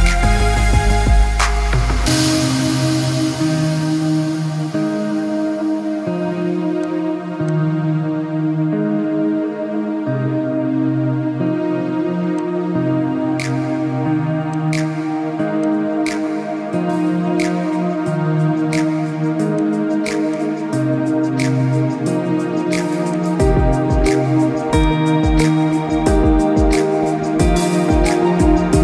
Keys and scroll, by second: 7.9 ctrl+-, 8.2 ctrl+-, 8.5 ctrl+-, 8.8 ctrl+-.